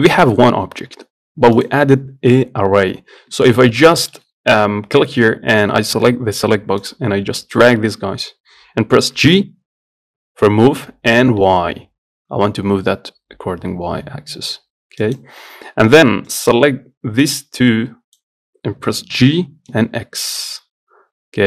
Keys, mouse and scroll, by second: 1.8-3.5 drag, 3.5 Tab, 4.2-6.9 shift+middle drag, 7.0-8.1 drag, 8.1-9.4 scroll down 4, 9.4 g, 16.6 click, 17.9 click, 19.4 g.